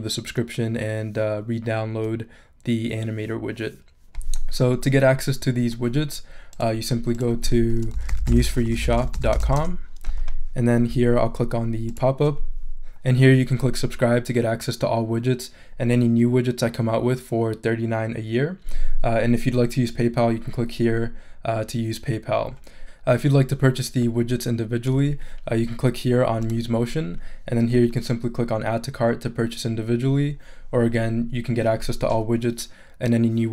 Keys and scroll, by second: 7.7-9.9 typing.